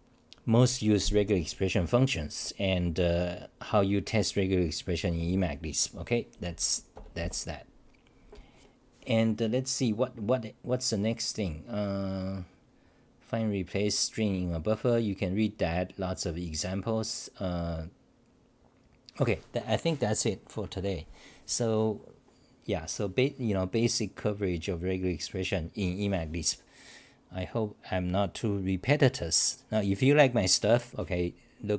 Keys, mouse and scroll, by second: 7.2 Tab.